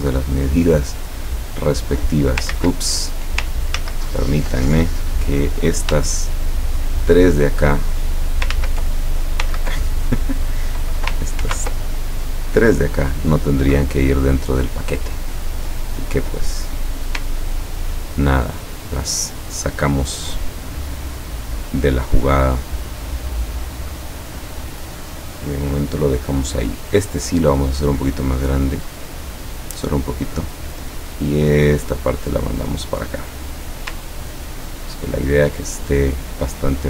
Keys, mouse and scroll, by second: 0.1-2.6 drag, 2.6 ctrl+z, 3.8 ctrl+z, 6.1 shift+click, 8.6 ctrl+z, 11.5 ctrl+y, 11.9 ctrl+click, 13.2-15.6 drag, 17.7-20.4 ctrl+drag, 20.7-23.4 ctrl+drag, 24.3 click, 26.6 click, 27.7-29.6 drag, 30.1 click, 31.3-32.5 drag, 34.8 ctrl+scroll up 2, 35.6 ctrl+scroll up 2, 36.0-36.8 ctrl+drag.